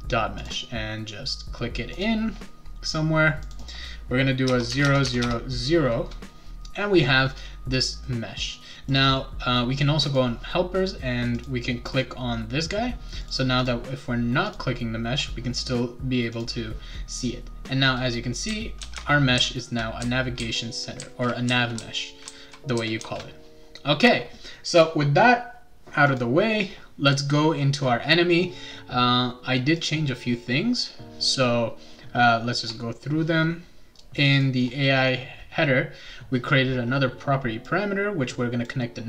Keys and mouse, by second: 0.4 click, 1.9 click, 3.4 click, 3.6 click, 4.7 Tab, 5.0 Tab, 8.0 right click, 10.0 click, 11.3 click, 11.9 click, 13.2 click, 13.6 click, 14.5 click, 16.3 click, 17.1 click, 18.1-23.2 right drag, 18.4-23.5 typing, 26.0 click, 29.7 click, 32.6 click, 34.1 click, 34.3 click, 37.7 click.